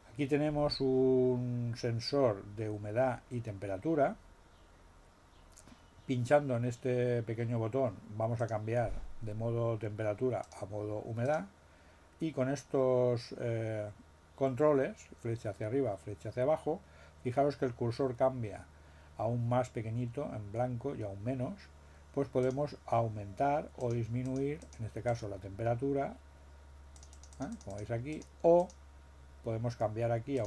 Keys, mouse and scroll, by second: 8.4 click, 10.4 click, 11.2 click, 22.4 click, 23.8 click, 24.2 click, 24.6 click, 25.0 click, 26.9 click, 28.1 click, 28.6 click, 30.3 click.